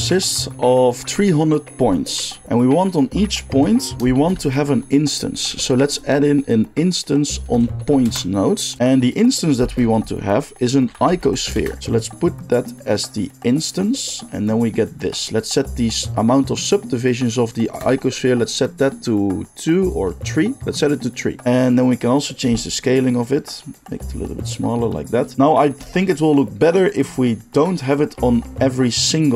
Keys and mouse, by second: 4.1 shift+a, 8.8-12.0 middle drag, 9.6 shift+a, 12.0-29.3 drag.